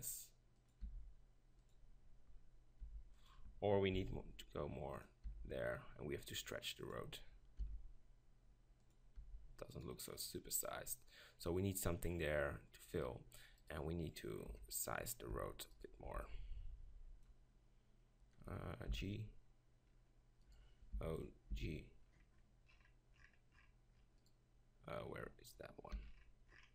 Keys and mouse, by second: 0.9 g, 2.9 g, 4.0 shift+f, 5.3 g, 7.0 click, 7.6 shift+f, 9.3 g, 13.6 right click, 14.5 KP_7, 15.4 Tab, 16.1 b, 18.9 g, 20.6-22.4 drag, 21.5 g, 21.5 o, 24.4 click, 26.0 g.